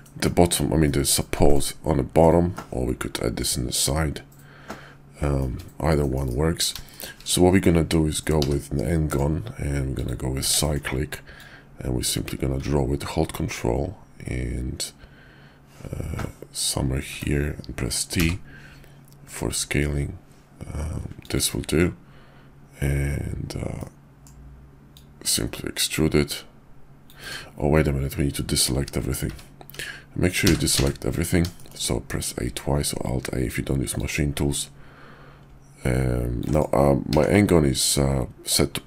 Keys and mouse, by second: 0.8-1.5 middle drag, 2.5-5.4 middle drag, 5.6 `, 6.1 KP_5, 6.9 shift+drag, 8.4 d, 9.8 click, 10.5 shift+drag, 11.3-17.2 drag, 23.8-24.2 middle drag, 29.2 `, 30.4 a, 30.8 a, 31.5 shift+click, 33.9-36.4 drag, 37.1 d.